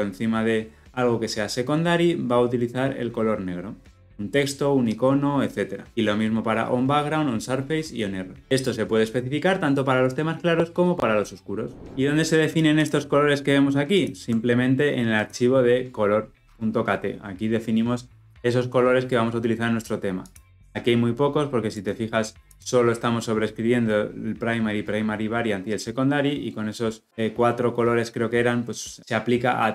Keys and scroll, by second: 13.9 ctrl+b.